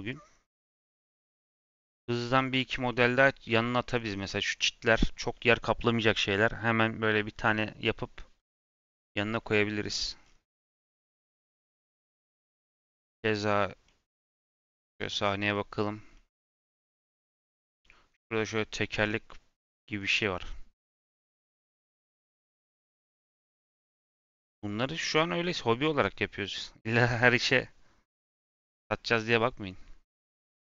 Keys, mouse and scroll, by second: 0.0-1.4 drag, 25.1-27.0 middle drag, 27.0-30.0 drag, 30.1 middle click.